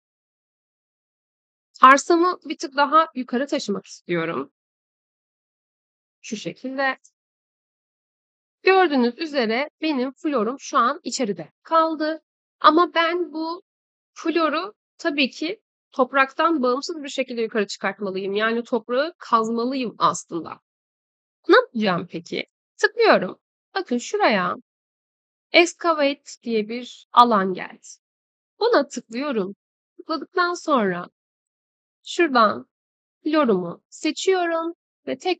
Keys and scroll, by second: 4.4 2, 4.8 0, 5.5 Return.